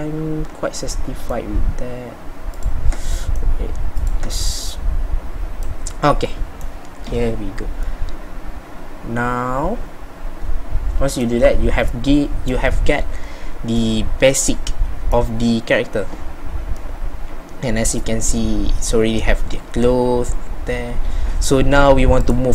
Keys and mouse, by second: 3.1-6.1 drag, 6.1-8.4 middle drag, 8.6 middle click, 8.8 middle click, 10.9 middle click.